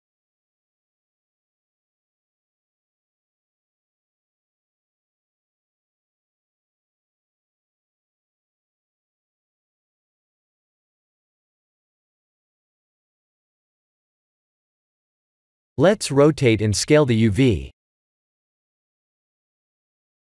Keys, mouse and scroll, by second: 0.6 shift+middle click, 1.1 middle click, 5.0-5.4 scroll up 1, 5.4 middle click, 6.3 scroll up 1, 8.7-9.9 scroll up 6, 10.0 shift+middle click, 11.3 click, 13.1 click, 16.4 click, 18.0 click.